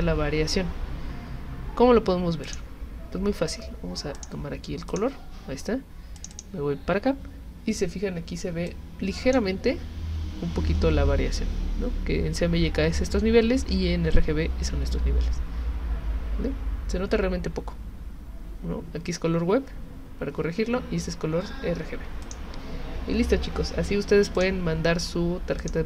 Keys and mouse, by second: 2.4 click, 4.2 click, 4.9 click, 6.2 click, 6.3 click, 8.7-9.3 drag, 22.2 click, 24.4 click, 25.6 click.